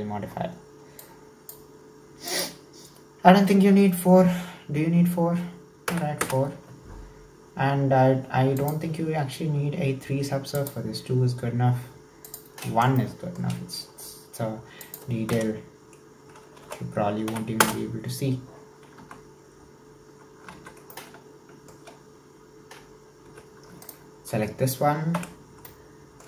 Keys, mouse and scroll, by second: 1.0 click, 2.4-5.5 drag, 8.6-13.0 drag, 13.0 shift+middle click, 13.6-14.8 scroll up 1, 14.8-16.6 drag, 16.6 BackSpace, 19.4 Tab, 20.6 alt+z, 20.9-23.3 middle drag, 23.3 2, 23.9 alt+right click, 25.2 /, 25.7-26.2 middle drag.